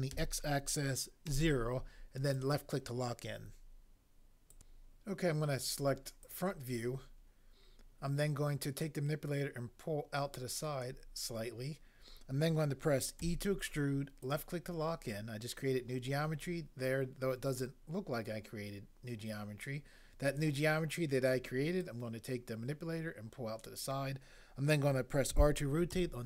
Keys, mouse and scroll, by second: 0.1 x, 1.3 0, 4.5 click, 8.8 click, 13.3 e, 14.2 click, 14.3 click, 21.8 click, 25.3 r, 25.9 y.